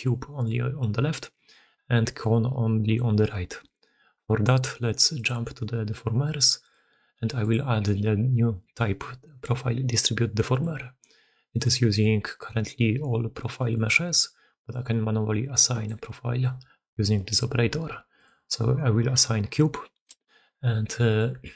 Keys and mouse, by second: 0.0-21.5 typing, 0.2 middle click, 1.1-1.5 middle drag, 2.8 middle click, 4.4 middle click, 5.1 middle click, 6.5-10.6 middle drag, 11.4 click, 15.5 click, 20.0 Return, 20.6-21.1 middle drag, 21.4 alt+a.